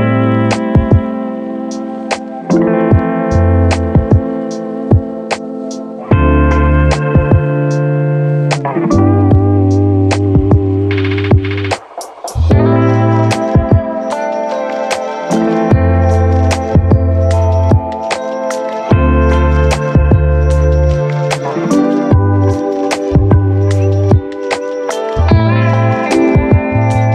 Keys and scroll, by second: 23.9 ctrl+1.